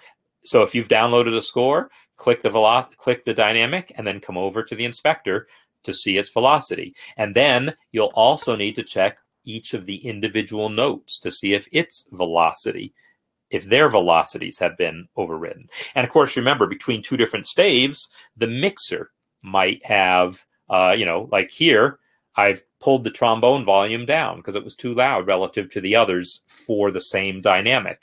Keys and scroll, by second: 19.7 F10.